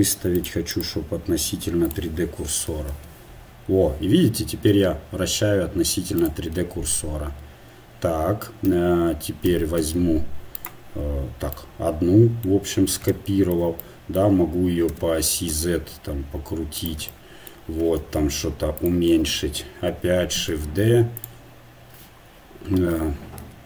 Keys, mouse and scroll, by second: 0.2-2.7 drag, 2.7 r, 6.6 r, 14.9 r, 18.0 s, 19.4 KP_7, 20.4 shift+d, 23.4 g.